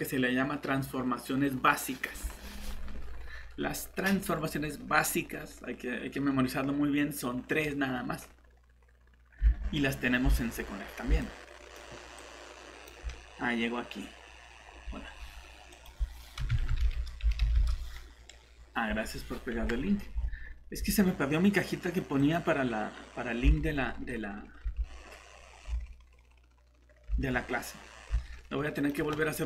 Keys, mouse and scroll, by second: 9.5 alt+Tab, 10.8 scroll down 1, 11.2 click, 16.4 alt+h, 16.5-17.4 typing, 17.5 Return, 20.2 alt+Tab, 24.7 alt+Tab, 25.7 alt+Tab, 27.1 alt+Tab, 28.1 alt+Tab.